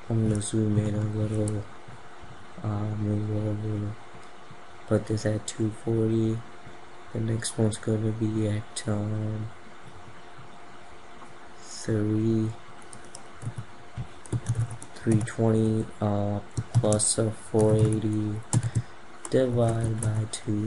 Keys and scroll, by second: 0.3 ctrl+=.